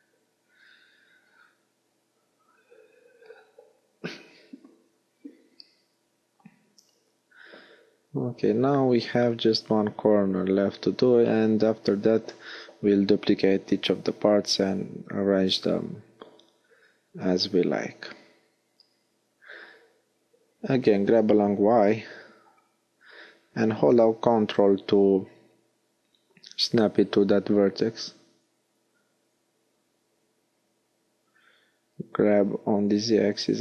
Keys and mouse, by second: 1.9 a, 3.2 alt+h, 14.1 g, 19.9-22.2 drag, 21.1 g, 23.9 click, 24.7 g, 26.3 middle click, 28.7 g.